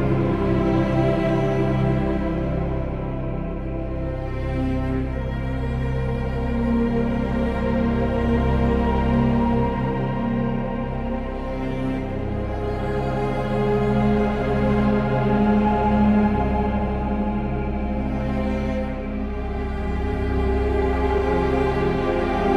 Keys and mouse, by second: 0.1 g, 0.4 z, 2.0 click, 5.0 ctrl+z, 6.4-6.8 ctrl+KP_Add, 8.5 g, 8.8 z, 14.7 alt+z, 16.0 ctrl+KP_Add, 16.1 ctrl+KP_Add, 16.2 ctrl+KP_Add, 16.6 alt+z, 17.9 g, 18.6 y, 18.8 click, 19.2 Tab, 19.8 Tab, 20.1 click, 20.7-22.5 ctrl+KP_Add.